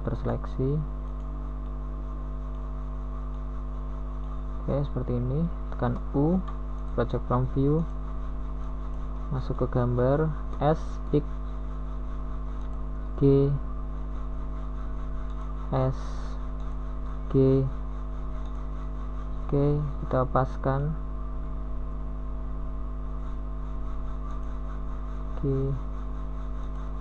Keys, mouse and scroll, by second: 1.9 b, 1.9 g, 14.3 middle click, 19.6 KP_3, 20.0 z, 22.3 b, 25.7 z.